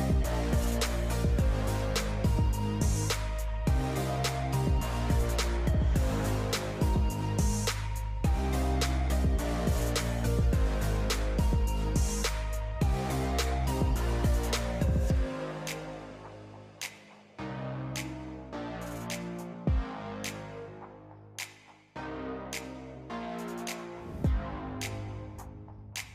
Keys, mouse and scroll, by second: 2.2 click, 2.6 click, 4.7 click, 5.7-11.4 drag, 14.0 shift+a, 15.5 Tab, 16.2 shift+a, 19.9 s, 21.8 click, 22.9 g, 24.3 click.